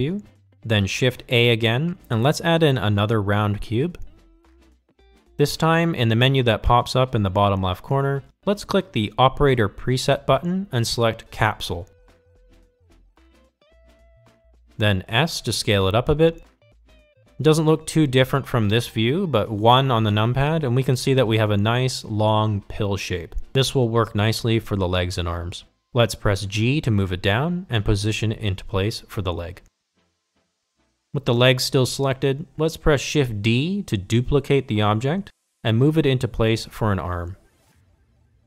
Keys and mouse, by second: 1.3 KP_7, 5.4 shift+a, 12.5-14.9 drag, 16.5 s, 22.7 KP_1, 25.7 g, 36.3 shift+d.